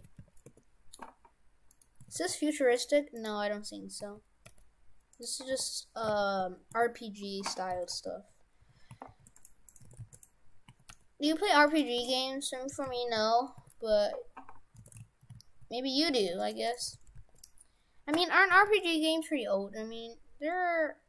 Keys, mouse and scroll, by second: 1.7 middle click, 2.1 shift+f, 3.2 right click, 4.0 a, 4.5 g, 5.5 r, 7.8 shift+f, 9.7 right click, 9.9 shift+f, 10.7 a, 10.9 g, 12.0 r, 14.9 shift+f, 16.7 right click, 16.9 shift+f, 18.5 a, 18.7 g.